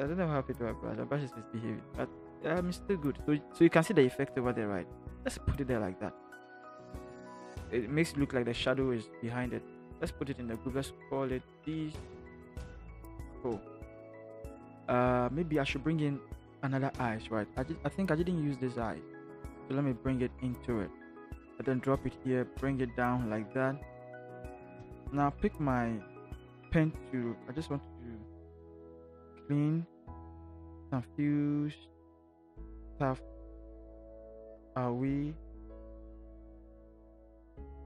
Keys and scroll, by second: 10.3 ctrl+g, 11.4-13.4 typing, 24.7 Return.